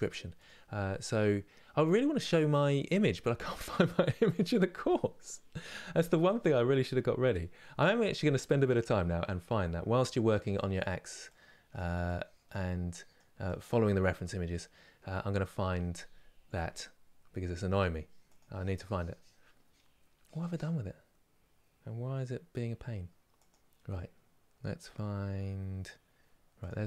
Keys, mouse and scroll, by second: 11.0-16.2 drag.